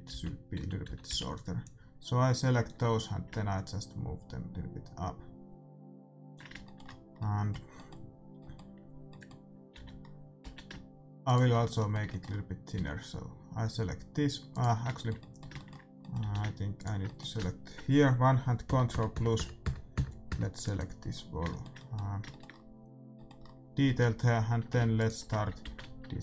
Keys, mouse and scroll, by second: 0.0-1.2 typing, 2.6-4.5 drag, 6.6 middle click, 9.7 a, 10.4 z, 11.2-13.1 right drag, 12.7 s, 14.7-16.7 middle drag, 16.2 a, 16.7-18.5 right drag, 18.3 middle click, 18.6 ctrl+KP_Add, 21.2 scroll down 1, 21.4 middle click, 24.9-26.2 right drag, 25.6 ctrl+z.